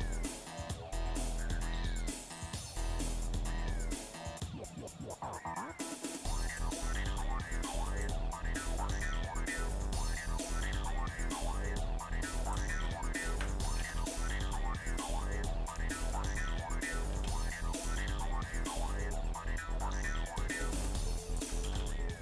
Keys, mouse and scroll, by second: 0.6-0.9 scroll down 2, 6.8 click, 8.0 click, 9.9-12.9 drag, 13.9 ctrl+z, 15.7 middle click, 16.4 z, 17.1 z, 18.5 shift+middle click, 20.3-21.5 drag, 21.6 ctrl+z.